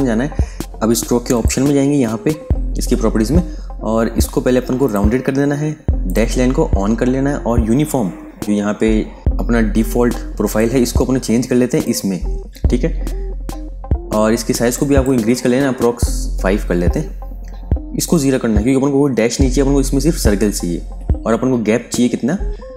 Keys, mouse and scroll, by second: 0.6 typing, 1.2 click, 4.7 click, 8.3 super+KP_Add, 10.3 click, 12.8 super+KP_Subtract, 14.6 click, 16.2 KP_5, 16.7 Tab, 17.9 click, 18.2 ctrl+a, 19.0 KP_0, 19.4 Tab.